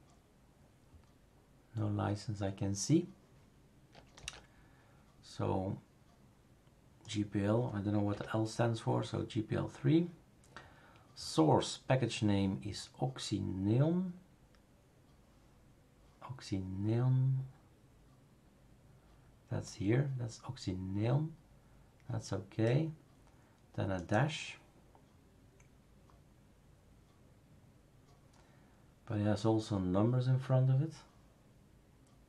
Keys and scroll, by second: 4.2 super+f, 8.1 Delete.